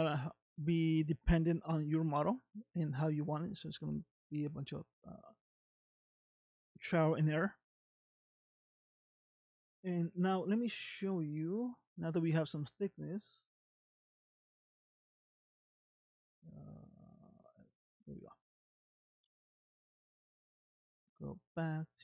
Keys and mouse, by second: 0.2 shift+middle click, 1.8 middle click, 3.8-4.9 middle drag, 8.0 middle click, 15.0 click, 16.0 click, 17.6 click, 18.5 shift+middle click, 20.9 ctrl+Tab, 21.6 ctrl+Tab.